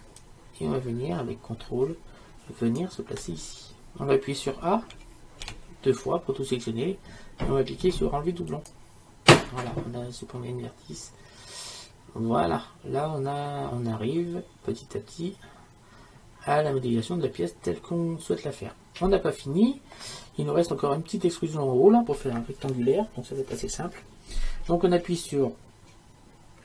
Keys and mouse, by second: 0.4-2.8 drag, 5.0 a, 5.5 a, 8.7 click, 10.3-12.2 middle drag, 12.3 middle click, 18.7 middle click, 19.1 middle click.